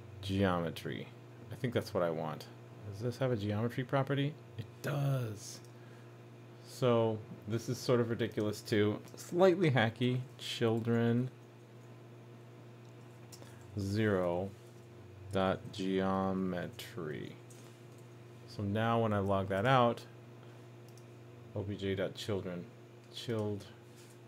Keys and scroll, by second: 18.0 super+s.